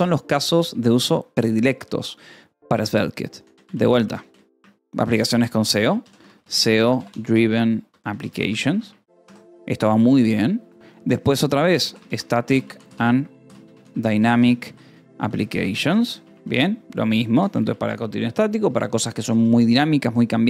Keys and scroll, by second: 0.5 Return, 3.3 e, 3.6 space, 4.4 Escape, 5.4-10.1 typing, 11.7-17.5 typing, 17.0 ctrl+s.